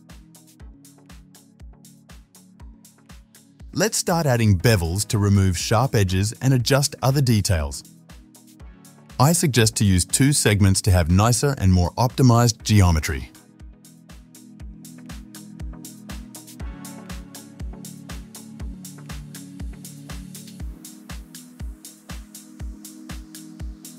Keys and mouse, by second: 0.0-2.6 f, 0.3 click, 0.4 middle click, 0.9-2.4 drag, 0.9 right click, 2.4-4.8 middle drag, 2.8 f, 4.8 click, 4.8 right click, 4.9 middle click, 5.0 click, 5.0 right click, 5.3-6.4 middle drag, 6.4 click, 6.5 shift+middle click, 6.7 alt+shift+click, 6.8 alt+shift+middle click, 8.0 Tab, 8.4 ctrl+b, 8.6-11.8 shift+middle drag, 10.4 ctrl+b, 11.8 click, 12.0 middle click, 12.1 shift+click, 12.1 middle click, 12.4 click, 12.5-13.9 alt+shift+middle drag, 12.5 alt+shift+click, 13.1 ctrl+b, 13.9 click, 13.9 right click, 14.1-16.2 middle drag, 15.0 ctrl+r, 15.9 Tab, 16.5 alt+shift+click, 17.0 middle click, 17.3 g, 18.0 ctrl+b, 19.0-20.1 alt+shift+middle drag, 19.5 ctrl+b, 19.8 Tab, 20.1 click, 20.2 alt+shift+middle click, 20.3 alt+shift+click, 20.4-22.4 ctrl+middle drag, 21.1 ctrl+b, 22.6-23.9 middle drag.